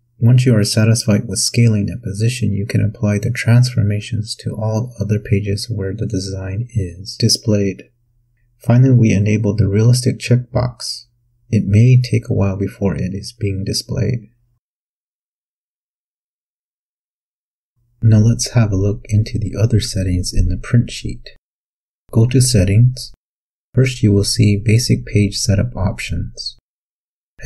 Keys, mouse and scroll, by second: 5.5 click, 11.9 click, 17.0-18.6 ctrl+scroll up 4, 18.8-19.5 ctrl+scroll up 4, 21.1 click, 24.6 click.